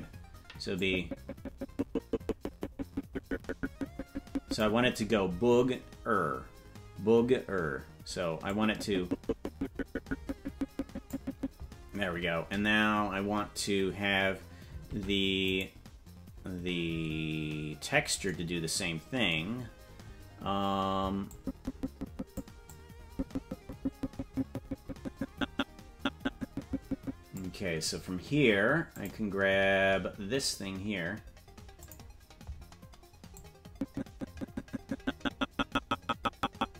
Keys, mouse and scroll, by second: 0.9-4.9 drag, 8.6-11.4 drag, 15.0 ctrl+Tab, 15.9 right click, 17.5-18.3 scroll down 15, 21.5-22.6 drag, 23.2-27.6 drag, 29.3 click, 32.0 click, 33.8-36.7 drag.